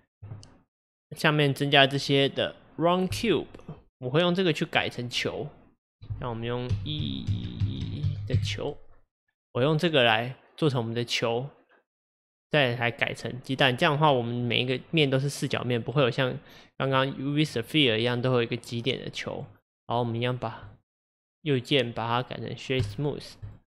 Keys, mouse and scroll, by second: 4.8-9.0 drag, 9.3-12.3 middle drag, 13.9-15.1 scroll up 2, 15.1-19.9 middle drag, 19.9-20.7 right drag, 20.7 click, 21.2-23.5 right drag, 23.5 click.